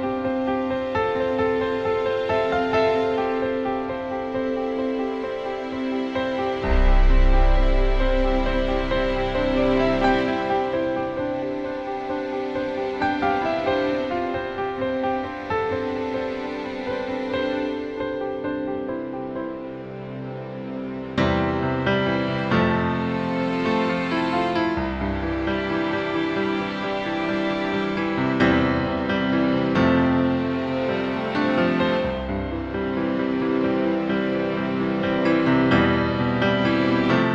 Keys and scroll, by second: 0.8 BackSpace, 15.3 BackSpace, 16.3 BackSpace, 17.3 BackSpace, 20.3 BackSpace, 21.1 BackSpace, 21.7 BackSpace, 22.8-24.3 typing.